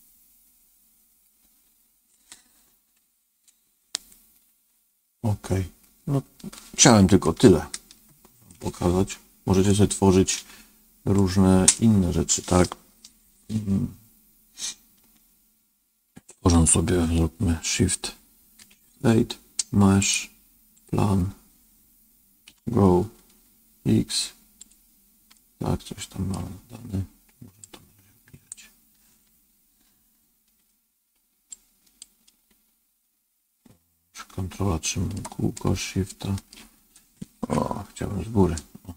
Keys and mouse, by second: 7.1-8.4 shift+middle drag, 9.6 middle click, 11.1 middle click, 18.6 shift+a, 22.4 g, 25.3 middle click, 27.6 click, 31.5 ctrl+click, 32.2-35.1 ctrl+middle drag, 35.5 shift+middle click, 37.9 KP_7.